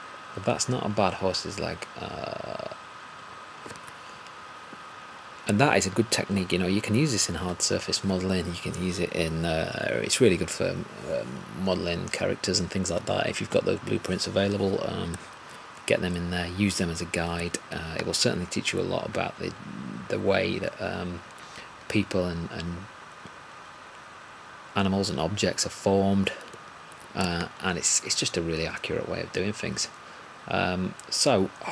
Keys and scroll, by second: 17.4 alt+`.